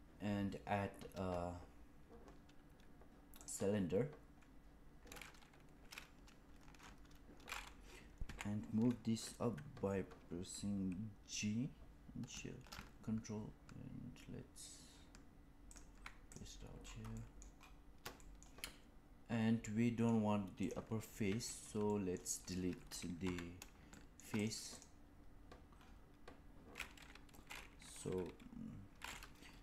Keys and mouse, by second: 8.1 g, 17.0 middle drag, 18.1 shift+middle drag, 18.5-20.0 middle drag, 20.5 click, 21.2 Tab, 21.8 middle click, 23.2 3, 23.8 shift+middle click, 24.3 click, 24.6 click.